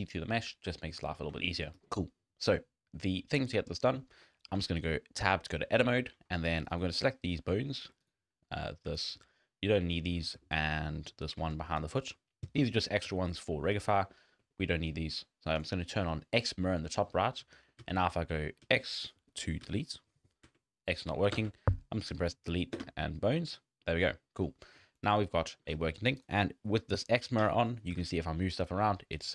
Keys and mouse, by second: 1.3 middle drag, 4.6 Tab, 6.7 click, 8.0 shift+click, 9.1 shift+click, 10.0 shift+click, 10.4 shift+click, 10.8 middle click, 11.8 shift+middle click, 13.1 shift+middle click, 13.9 shift+middle click, 14.3 middle click, 15.5 click, 17.5 drag, 17.8 x, 18.5 click, 18.6 x, 19.2 click, 19.6 x, 20.4 x, 21.3 Delete, 23.5 click, 23.8 click, 24.2 click, 24.6 click, 25.5 shift+click, 27.9 g.